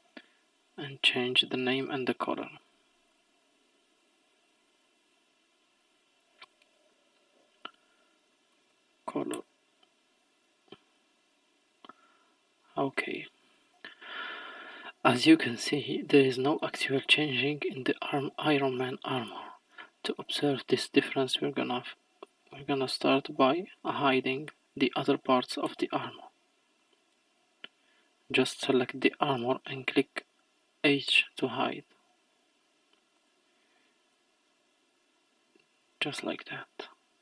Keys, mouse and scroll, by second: 0.8 click, 1.8 click, 2.2-5.2 drag, 5.8-9.0 drag, 11.4-11.8 scroll down 1, 11.8-12.1 scroll up 1, 12.1-13.0 scroll down 4, 13.0 middle click, 14.4-15.5 scroll down 1, 15.5 scroll up 1, 17.0-19.3 middle drag, 19.3-19.7 scroll down 1, 20.1-20.9 scroll up 1, 22.4 click, 23.3-24.9 scroll down 1, 25.7 h, 26.8 click, 27.3-29.4 scroll down 1, 31.1 h, 32.7 ctrl+z, 33.2 click, 34.2 h, 35.2-35.8 scroll down 2, 35.8-36.5 scroll up 2, 36.5-37.1 scroll down 2, 37.1-37.2 scroll up 2.